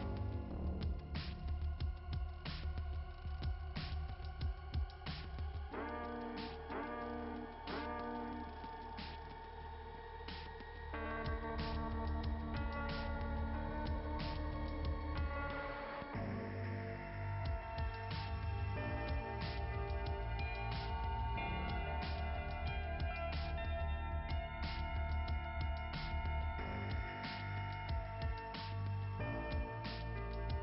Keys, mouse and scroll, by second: 1.2 click, 1.5 click, 3.0 click, 3.4 click, 7.6 click, 7.8 click, 8.7 click, 13.9 click, 15.1 click, 15.4 click, 16.4 click, 16.7 click, 19.1 click, 20.7 click, 30.2 click.